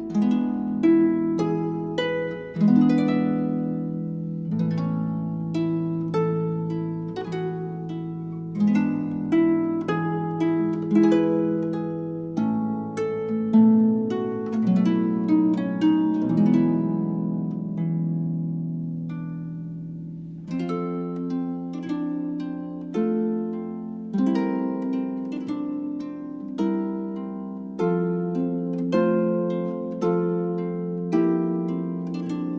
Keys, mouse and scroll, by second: 2.8 right click, 4.8-6.7 middle drag, 7.2-8.0 middle drag, 8.3 z, 9.9 z, 10.7-11.8 drag, 18.1-18.5 drag, 21.4 click, 23.0-25.8 drag, 26.0 click, 30.5 a.